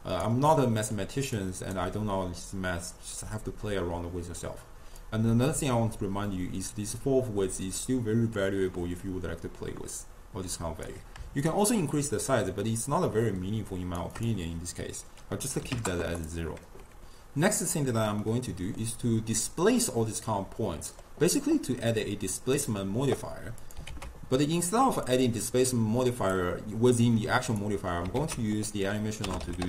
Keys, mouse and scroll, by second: 0.7 middle click, 1.4 click, 5.1-8.1 drag, 11.5-16.3 shift+drag, 18.3-19.5 middle drag, 19.5 click, 20.3-22.0 middle drag, 22.0-23.8 drag, 23.9 ctrl+a, 26.2 click, 27.5 click, 28.2 ctrl+a.